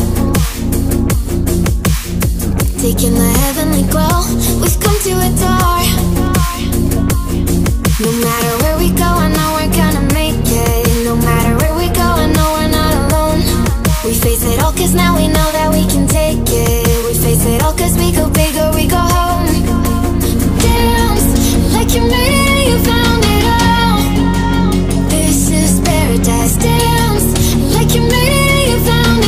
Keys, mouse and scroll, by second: 0.3 click, 1.4 BackSpace, 2.0 click, 3.1 BackSpace, 4.4-6.8 drag, 7.5 right click, 9.2-12.8 drag, 15.9 click, 21.1 click, 22.2 right click, 23.2 click, 25.4 click, 27.3 ctrl+z, 28.8-29.2 drag.